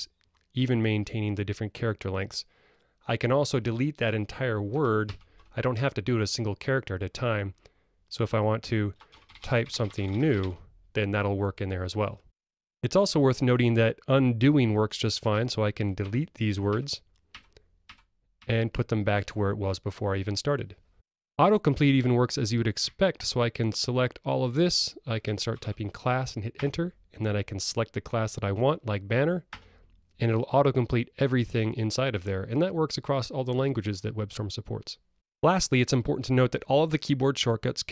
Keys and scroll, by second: 5.1 alt+BackSpace, 16.1 super+z, 16.7 super+z, 17.3 super+z, 17.8 super+z, 26.7 Return, 29.4 Return.